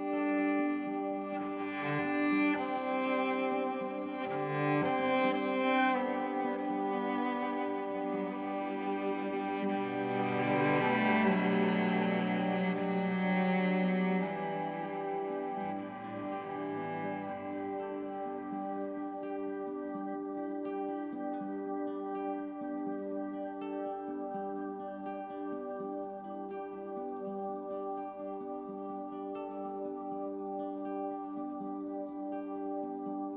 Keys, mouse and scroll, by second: 0.8-3.0 drag, 3.0-5.5 middle drag, 5.5-9.7 drag, 13.3 click, 14.3-15.2 middle drag, 15.2-17.1 scroll up 1, 17.1-21.5 middle drag, 21.5-22.7 drag, 22.7 KP_0, 24.5-25.6 middle drag, 25.6 scroll up 1, 25.6-28.7 middle drag, 28.7-29.9 scroll up 2, 29.9-33.3 middle drag.